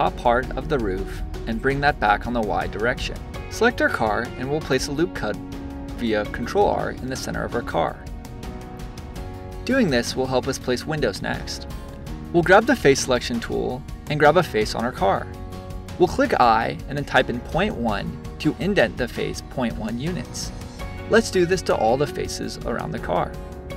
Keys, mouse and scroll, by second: 2.8 a, 4.1 ctrl+r, 8.6 click, 12.3-13.9 drag, 19.5 click, 19.8-22.5 middle drag.